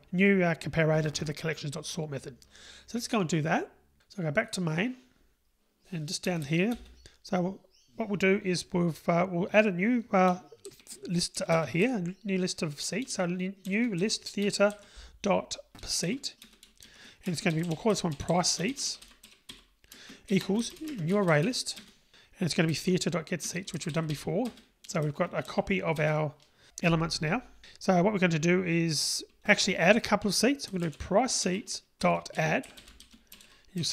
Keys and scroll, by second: 14.5 Return, 20.4 Return, 21.8 Return, 23.8 Return, 31.5 Return.